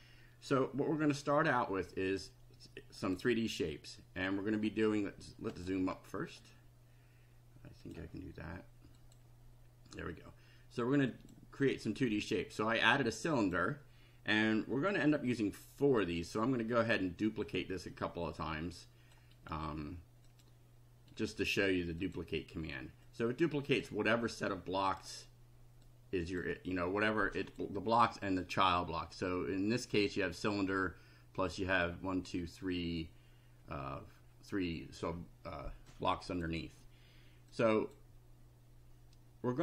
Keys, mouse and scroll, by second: 3.0 click, 4.8 scroll up 2, 5.5 click, 6.0 scroll up 2, 7.8 click, 9.0 click, 11.1 click, 13.0 click, 16.0 right click, 17.4 click, 18.3-19.4 drag, 19.4 right click, 20.3 click, 21.1 right click, 22.0 click, 23.0 click, 24.3 click, 25.8 click, 27.1 click, 35.9 click, 37.5 click.